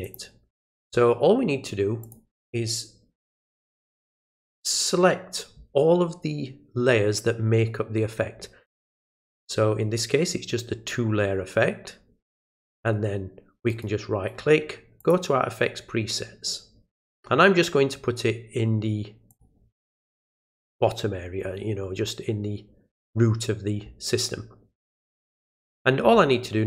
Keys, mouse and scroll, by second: 0.0 click, 2.0 click, 3.9 ctrl+click, 13.7 right click, 15.0 click, 19.3 click.